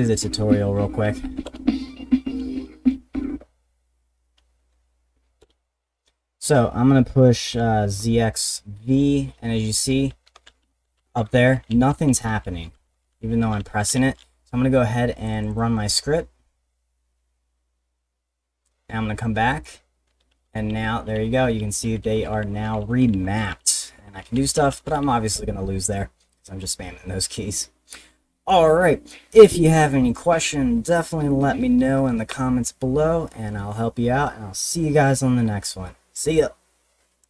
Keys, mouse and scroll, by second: 5.4 Return, 9.6-14.8 typing, 15.2 click, 15.3 click, 15.5 click, 19.5 click, 19.8-25.5 typing, 26.9-30.5 middle drag, 37.2 click.